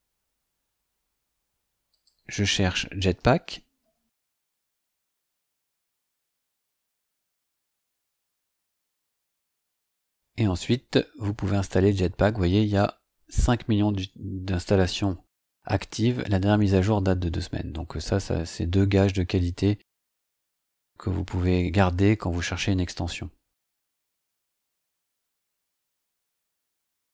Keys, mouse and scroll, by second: 1.9 click, 2.8-4.9 typing, 5.5 Return, 9.3 click, 9.8 scroll up 2, 23.6 click.